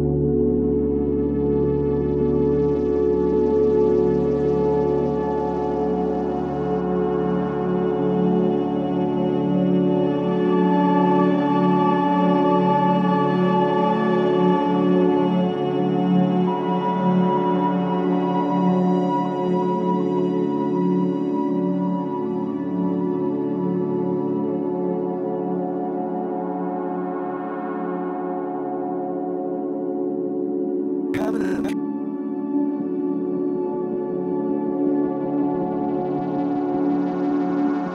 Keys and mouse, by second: 0.0-2.5 typing, 2.5-5.4 drag, 5.4-6.0 typing, 7.0-8.0 typing, 7.3-9.5 drag, 9.5 typing, 11.1-12.0 typing, 11.2 click, 14.4-15.6 typing, 19.8 shift+click, 20.9 alt+click, 22.2-23.7 typing, 24.5 Return, 25.3 typing, 25.5-27.0 alt+drag, 27.5 typing, 28.8-35.5 ctrl+alt+drag, 35.8-36.3 typing, 37.5 alt+shift+click.